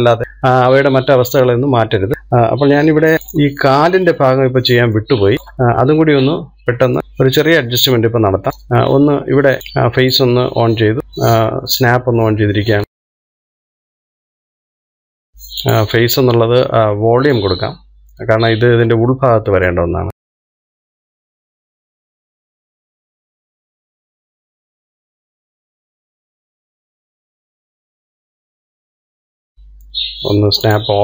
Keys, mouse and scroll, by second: 3.2 scroll up 1, 3.9-5.5 shift+middle drag, 5.5 scroll up 1, 6.0-7.1 shift+middle drag, 7.1-8.5 drag, 8.5-9.6 middle drag, 9.6-12.2 drag, 12.8 click, 12.9 middle click, 13.4 click, 13.7 middle click, 13.9 click, 14.4 middle click, 14.7 click, 15.0-16.7 middle drag, 16.7-19.6 drag, 19.6 middle click, 20.3 click, 20.7 middle click, 20.9 scroll up 1, 21.0 middle click, 21.7 shift+click, 22.3 click, 22.6 shift+click, 22.7 middle click, 23.6 KP_3, 23.8 scroll up 2, 23.9 shift+middle click, 24.3 click, 24.5 click, 25.3 click, 25.5 click, 25.8 shift+middle click, 26.7 ctrl+z, 27.0 middle click, 27.3 click, 27.6 shift+click, 27.8 middle click, 28.2 click, 28.6 middle click, 28.9 KP_3, 29.3 click.